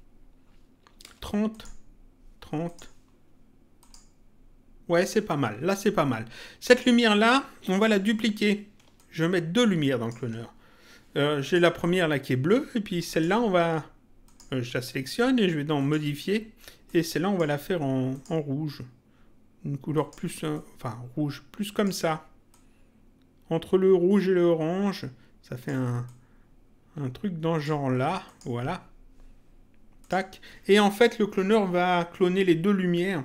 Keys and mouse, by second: 1.5 click, 2.6 click, 3.8 click, 6.7 click, 8.9 ctrl+click, 11.4 click, 12.9 click, 14.2 click, 15.7 click, 16.9 click, 18.1 click, 19.9 click, 22.5 click, 26.0 click, 28.2 click, 30.0 click.